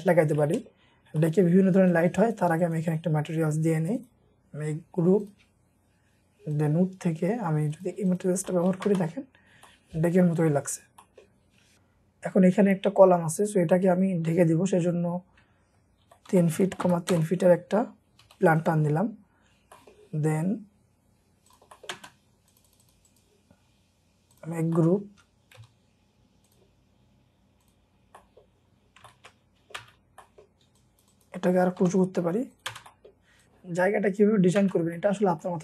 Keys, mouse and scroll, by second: 0.1 scroll down 1, 0.4 shift+middle click, 2.1 double click, 2.6 right click, 8.1 double click, 8.5 middle click, 8.9 space, 9.0-9.5 scroll down 1, 9.7 middle click, 10.7 scroll up 1, 11.0 middle click, 11.3-11.8 scroll down 1, 12.7 middle click, 14.5-15.4 scroll up 1, 15.8-17.3 typing, 18.3-19.4 scroll up 1, 19.4-19.8 scroll up 2, 19.8 middle click, 20.2-20.9 scroll up 1, 21.8 middle click, 22.0 space, 22.3-22.7 scroll down 3, 22.7 double click, 23.1 right click, 24.8 middle click, 25.5-26.2 scroll up 2, 25.6 m, 26.2-27.9 scroll up 1, 27.9 scroll down 1, 28.1 middle click, 29.0 middle click, 29.8 space, 30.0 scroll up 1, 30.2 middle click, 30.5 scroll down 1, 30.8-31.1 scroll up 1, 31.1 double click, 31.8 typing, 32.9 middle click, 32.9 space, 34.6 space, 34.9 middle click.